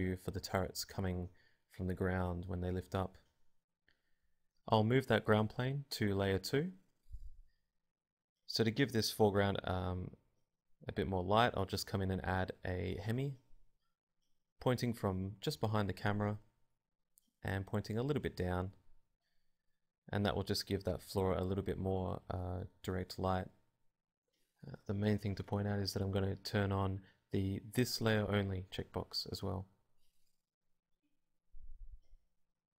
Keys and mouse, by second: 0.0 Escape, 2.2 m, 6.1 shift+2, 6.8 click, 8.0 click, 9.0-10.0 drag, 11.8 click, 12.3 shift+a, 14.3 g, 14.6-17.3 drag, 14.7 r, 15.4 g, 15.8 r, 17.3-18.6 middle drag, 17.9 r, 18.6-20.0 drag, 22.6-26.8 drag, 27.5 click, 28.4 middle click, 29.1 middle click, 29.9 r, 30.5 g, 31.3 click, 31.6 middle click.